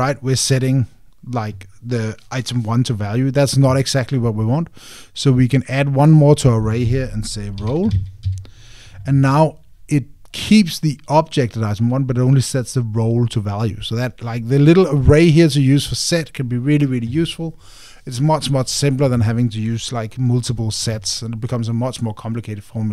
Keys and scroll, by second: 9.0 Tab.